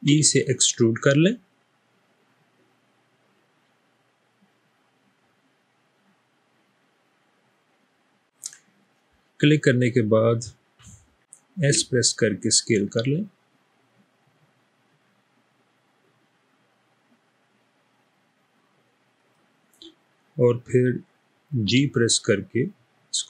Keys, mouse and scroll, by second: 0.1 e, 11.6 s, 21.8 g.